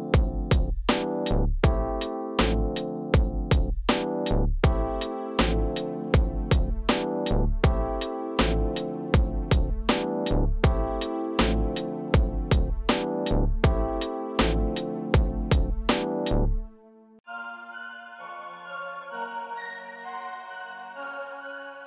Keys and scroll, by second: 7.0 0, 11.0 0.